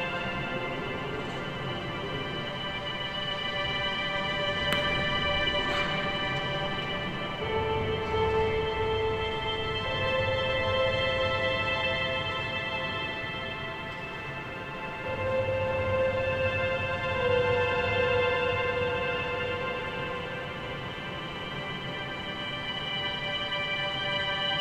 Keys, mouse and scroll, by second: 1.3 r, 2.7 g, 5.0-6.1 scroll down 4, 5.3 a, 5.5 a, 6.1 shift+middle click, 6.5-7.4 scroll up 5, 7.4 2, 7.7 click, 7.8 click, 8.4 a, 8.6 a, 8.9 click, 9.4-11.2 middle drag, 11.2 Page_Down, 11.4 KP_7, 13.1 g, 15.2 click, 15.7 g, 16.8 scroll down 1, 17.1 a, 17.3 a, 17.4-17.8 scroll down 1, 17.8-20.0 shift+middle drag, 20.0-20.8 scroll up 1, 20.8-21.4 scroll down 4, 21.4 Tab, 22.0-22.5 shift+middle drag, 22.5-23.1 scroll up 3, 23.1 shift+middle click, 23.4-23.8 scroll up 2, 23.8 Tab, 24.5 click.